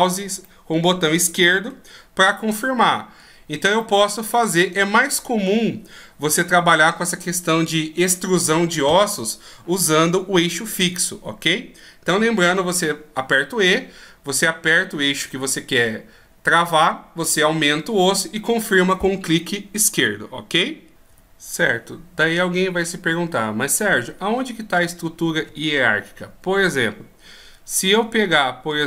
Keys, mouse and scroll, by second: 0.4 middle click, 2.3 middle click, 26.2 KP_1, 27.6 middle click.